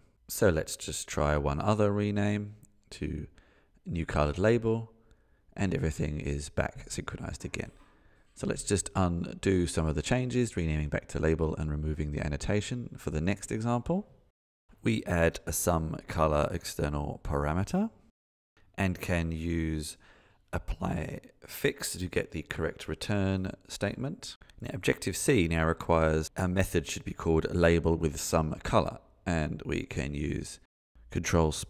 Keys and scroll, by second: 9.1 super+s, 20.1 super+s, 24.4 alt+Return, 30.1 Tab.